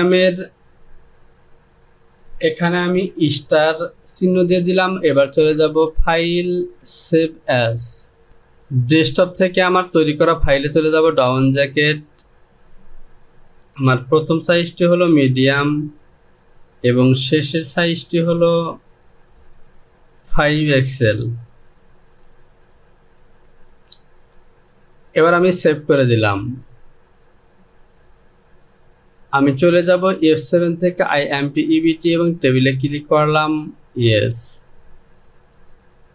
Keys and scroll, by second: 2.9 KP_Multiply, 14.8 m, 19.8 KP_5, 20.5 x, 21.6 l.